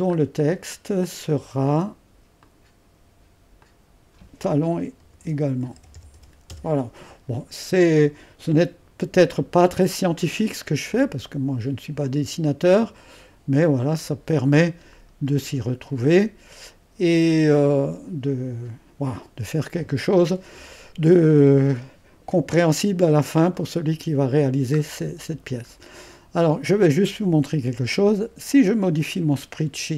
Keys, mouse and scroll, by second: 0.1-2.4 scroll up 1, 2.4-5.0 drag, 3.7 typing, 5.0-6.7 typing, 9.6-15.0 drag, 11.0 typing, 15.0-16.7 scroll down 1, 16.9-18.5 scroll down 1, 19.9-20.7 typing, 22.3-23.6 drag, 23.6-25.0 middle drag, 25.0-25.5 scroll up 1, 25.5-26.5 scroll down 1, 28.8-29.9 drag.